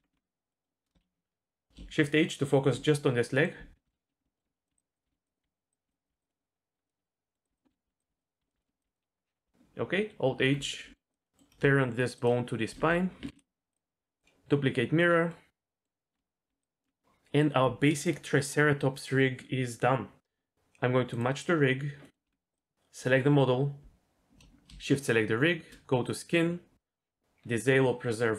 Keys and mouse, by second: 0.0 Tab, 0.1 Tab, 0.5 middle click, 2.5 shift+h, 3.3 middle click, 3.7-6.2 typing, 3.9 ctrl+KP_3, 4.3 shift+middle click, 5.0 click, 6.3 middle click, 7.0 middle click, 7.5-8.8 typing, 8.6 shift+middle click, 10.3 alt+h, 10.7 middle click, 11.2 middle click, 13.2 ctrl+p, 13.7 click, 15.3 middle click, 16.5 d, 16.6 right click, 16.8 d, 21.1 click, 22.0 middle click, 22.2 Tab, 26.1 click.